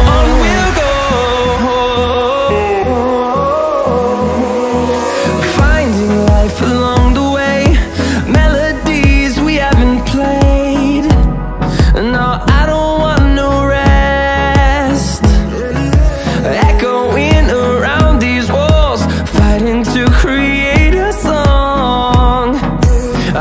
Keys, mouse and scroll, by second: 3.2 click, 6.4 ctrl+a, 9.7 ctrl+c, 12.2 click, 14.8 ctrl+v, 17.5 click.